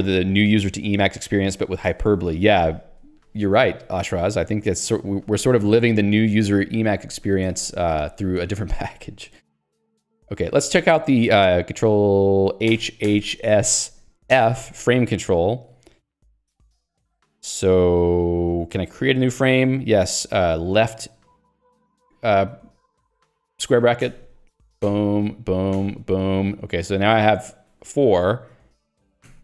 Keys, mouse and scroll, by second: 7.9 ctrl+g, 8.4 Escape, 13.5 s, 14.4 f, 24.6 [, 25.6 [, 26.4 [.